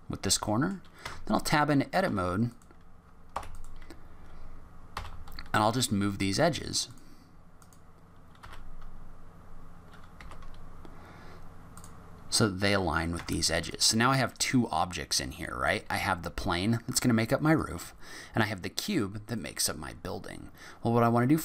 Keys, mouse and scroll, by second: 0.1 scroll up 3, 0.4 middle click, 1.0 Tab, 2.0 3, 2.5 click, 3.3 2, 3.5 click, 4.9 g, 7.6 click, 8.4 g, 13.1 Tab, 13.7 click, 14.3 click, 14.7 click, 15.3 click, 17.5 click, 19.3 click, 20.5-21.0 scroll up 1, 21.0 middle click.